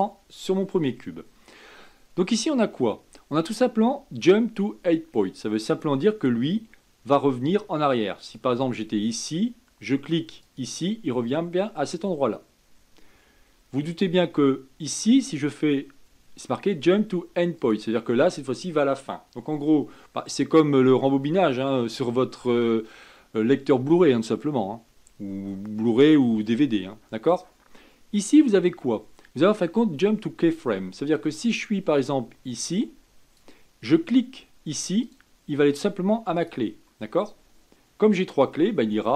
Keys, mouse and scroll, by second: 5.7-13.4 drag, 17.6-20.7 drag, 27.2-30.3 drag, 31.1-34.3 drag, 35.0-39.1 drag.